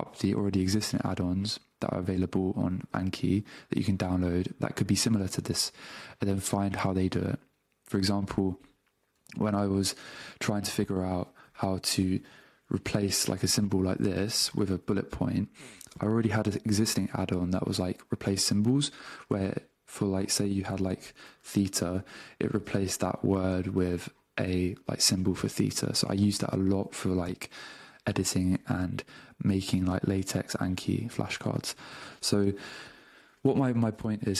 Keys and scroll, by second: 9.4 super+Tab, 11.4 a, 12.7 -, 14.2 space, 21.9 a, 22.1 space, 28.5 alt+BackSpace.